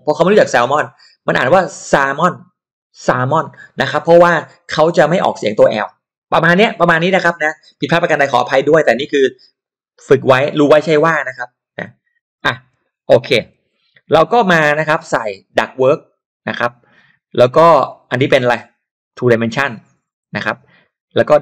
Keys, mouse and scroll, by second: 11.7-12.9 typing, 15.0 click, 17.8 click, 19.1 click.